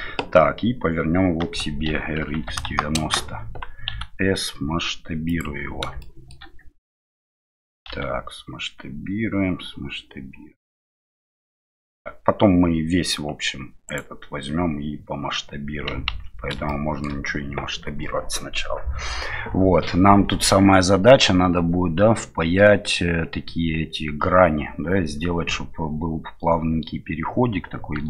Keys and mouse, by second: 1.8 r, 6.1 middle click, 7.9 s, 16.1 ctrl+z, 16.6-17.0 middle drag.